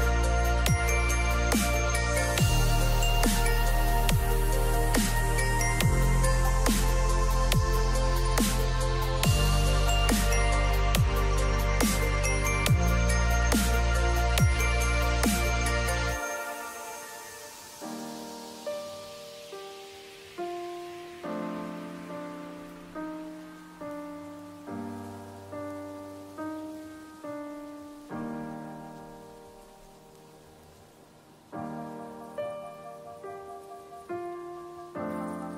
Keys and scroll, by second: 26.8 ctrl+z.